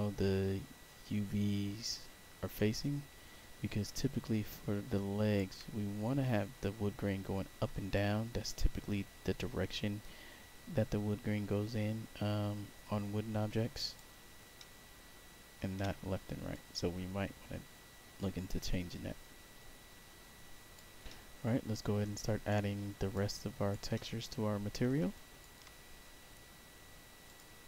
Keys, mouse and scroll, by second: 7.8-13.9 alt+drag, 14.5 alt+middle click, 16.4-20.7 alt+drag, 21.0 alt+middle click, 22.4 alt+right click, 23.2 alt+click, 23.8 alt+middle click, 25.0 alt+click, 27.2 click.